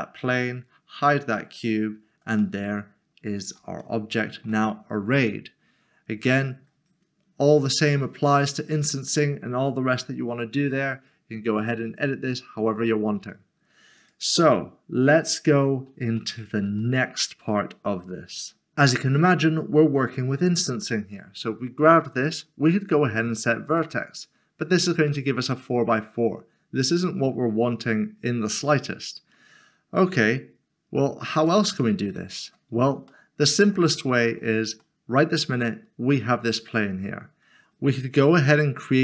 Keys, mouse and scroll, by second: 1.9 scroll down 1, 2.6 middle click, 4.0 shift+middle click, 5.2-5.8 scroll up 1, 5.8 scroll down 1, 14.0 click, 16.2 middle click, 17.0 shift+middle click, 20.5 click, 23.7 click, 25.2 middle click, 31.3 middle click, 31.5 click, 34.3 scroll up 1, 34.8 shift+middle click.